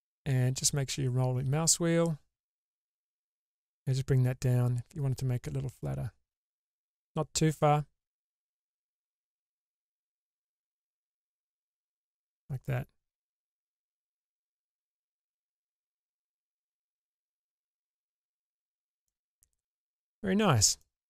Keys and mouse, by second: 11.8 middle click, 13.8 Tab, 16.4 alt+z, 17.6-18.0 middle drag, 18.1 Tab, 18.6 Tab, 18.7 shift+space, 19.2-20.8 middle drag.